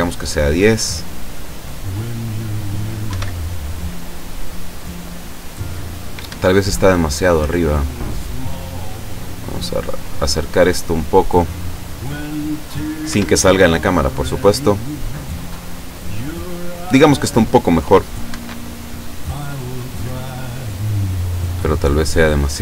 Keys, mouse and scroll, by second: 1.6 right click, 3.1 F12, 6.3 Escape, 6.9 right click, 7.7-9.2 drag, 9.6 right click, 10.9-12.5 drag, 13.1 F12, 18.3 Escape, 19.5 right click, 20.4-21.6 drag, 22.1 right click.